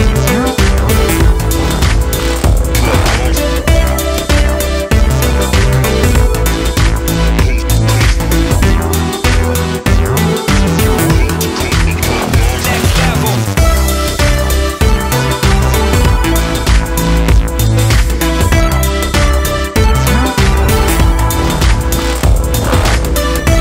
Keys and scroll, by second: 4.9-7.8 [, 19.6-22.6 typing.